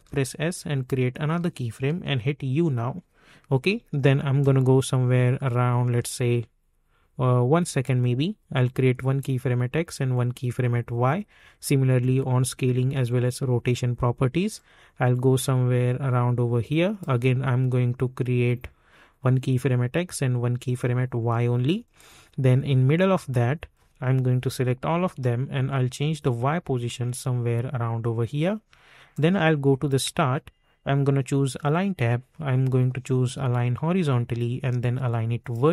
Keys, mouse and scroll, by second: 0.8 click, 2.0 u, 4.3-9.2 drag, 14.5-19.3 drag, 19.3-24.8 drag, 24.8 ctrl+a, 25.5-33.5 drag, 33.5-35.7 drag.